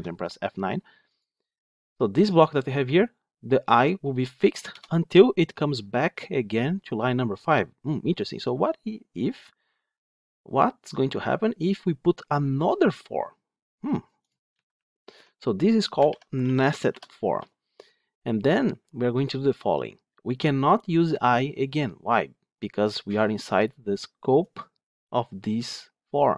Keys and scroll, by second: 14.4 Tab.